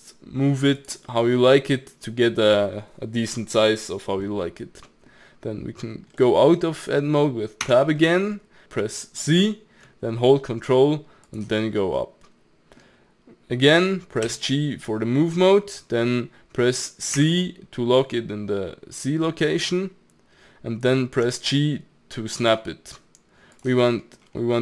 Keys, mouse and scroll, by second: 1.1-4.3 middle drag, 4.9-7.6 middle drag, 7.6 Tab, 8.0 middle click, 11.7-12.0 scroll down 3, 12.0-14.2 middle drag, 14.2 g, 23.8-24.4 middle drag, 24.4-24.6 scroll up 3.